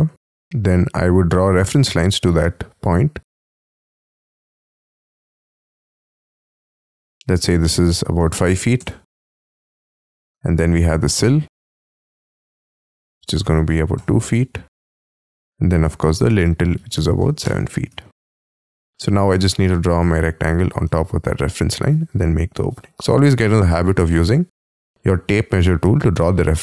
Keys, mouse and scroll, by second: 0.2 t, 1.0 t, 3.4 shift+click, 3.7 middle click, 5.9 shift+click, 6.3 middle click, 8.2 5, 8.6 ', 8.7 Return, 9.4 space, 9.6 e, 10.5 scroll up 4, 10.7 t, 12.3 Up, 13.4 2, 13.7 ', 13.9 Return, 14.4 space, 14.7 t, 15.8 Up, 16.7 7, 17.2 ', 17.4 Return, 17.9 space, 18.6 r, 20.8 space, 21.9 p, 23.0 middle click, 25.6 middle click.